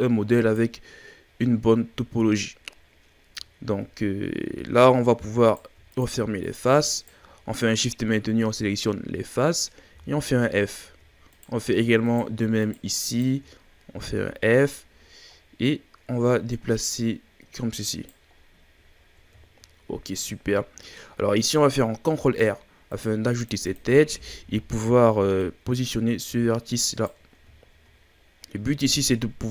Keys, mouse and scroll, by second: 0.0 right click, 1.5-2.8 scroll down 3, 2.8-3.7 scroll up 5, 3.7-4.4 scroll down 2, 4.4-4.9 scroll up 1, 4.9-5.4 shift+scroll down 5, 5.4 right click, 5.9 shift+right drag, 6.4 shift+right drag, 6.9 shift+right click, 9.9 f, 10.7-11.3 shift+scroll up 4, 11.3 right click, 12.0 shift+right click, 12.6 shift+right click, 13.1 shift+right click, 13.9 f, 14.3-14.9 scroll down 4, 14.9-15.6 scroll up 5, 15.6 right click, 18.3-19.0 scroll down 5, 19.0-19.3 ctrl+scroll up 4, 19.4-20.9 shift+scroll down 2, 20.9-21.7 scroll up 3, 22.1 ctrl+r, 23.6 click, 24.3 shift+scroll down 2, 24.6-25.4 scroll up 2, 25.4 right click, 27.3-28.0 scroll down 5, 28.0-29.5 scroll up 2.